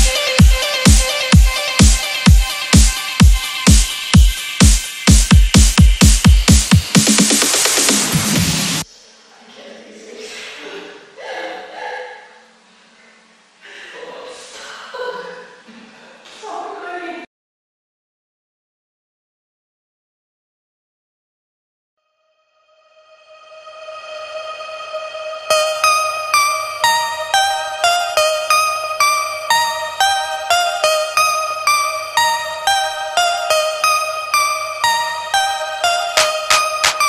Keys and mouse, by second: 0.7 Down, 2.5 click, 2.8-4.3 typing, 8.0 click, 12.2-29.9 typing, 31.0-31.8 typing, 32.0 shift+Return, 33.5-37.0 typing.